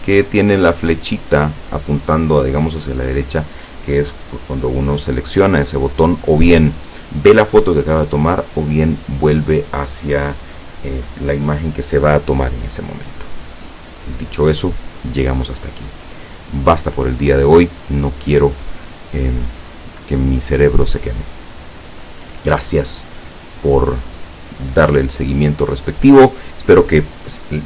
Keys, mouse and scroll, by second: 16.8-17.3 scroll up 2, 17.6-18.0 scroll down 2, 26.5 scroll down 2.